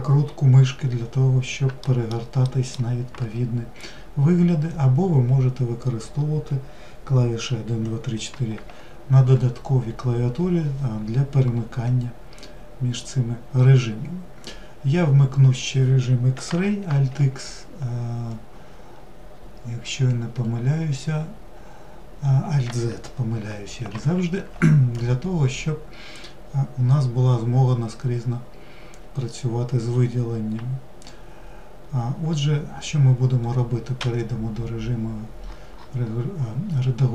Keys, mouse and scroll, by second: 1.6 alt+middle click, 2.3 alt+middle drag, 12.1-15.1 scroll up 1, 18.5 scroll down 3, 19.6 scroll down 7, 35.3-36.4 scroll up 11, 36.4 scroll down 2.